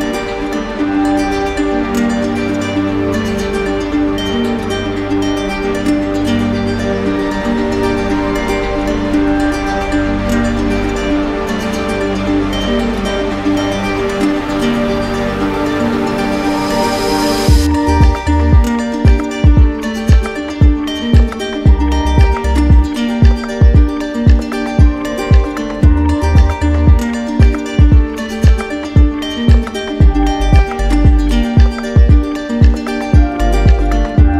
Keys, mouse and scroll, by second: 0.3 ctrl+z, 2.5 click, 2.7 ctrl+z, 8.1 click, 16.7 click, 16.8 ctrl+i, 20.4-22.2 ctrl+drag, 21.5 ctrl+i, 23.9 ctrl+click, 25.8 ctrl+click, 26.9 ctrl+click, 31.5 ctrl+click.